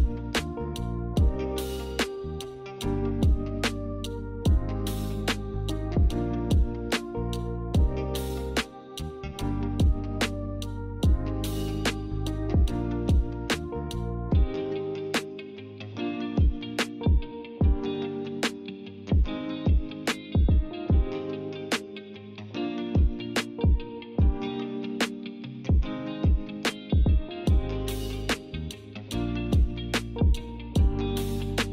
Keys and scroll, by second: 0.1 0, 0.2 Return, 20.5 g, 23.7 z.